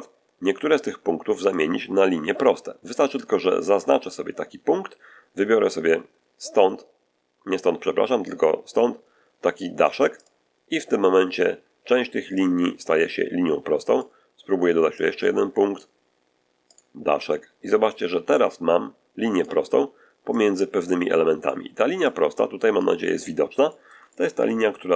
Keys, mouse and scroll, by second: 1.3 click, 6.5 click, 10.1 click, 12.3-14.1 drag, 14.9 click, 16.6 click, 17.8-19.5 drag, 20.3-21.5 drag, 22.0-22.9 drag, 23.2 scroll down 1, 23.6-24.9 shift+middle drag, 24.8-24.9 shift+scroll up 1.